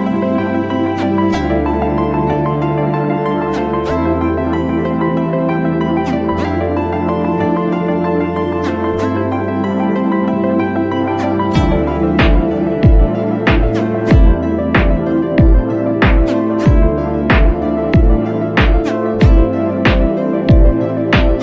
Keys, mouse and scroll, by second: 0.5 click, 1.0 click, 18.5 click.